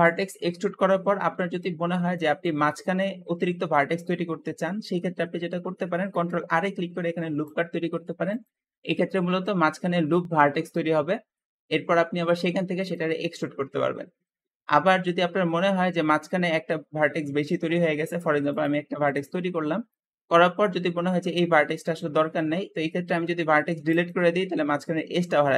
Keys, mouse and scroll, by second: 4.7 Escape, 5.0-6.3 middle drag, 6.3 ctrl+r, 8.2 ctrl+click, 8.7-11.7 middle drag, 11.7 e, 14.1-15.2 middle drag, 15.2-15.5 scroll up 1, 16.0 shift+click, 18.0 ctrl+r, 18.9-19.9 ctrl+drag, 22.9 x.